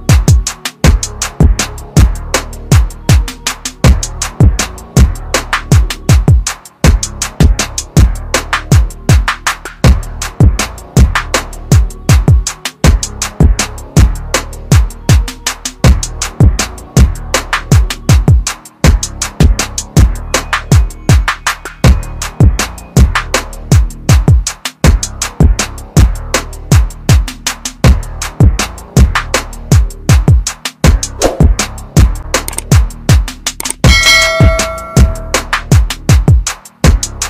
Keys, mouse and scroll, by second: 0.9 click, 7.1 click, 11.8 click, 17.2 click, 22.1 scroll down 1, 24.4 scroll up 1, 25.0-26.0 scroll down 1, 26.2 click, 27.6 scroll up 1, 29.4 click, 34.2 click.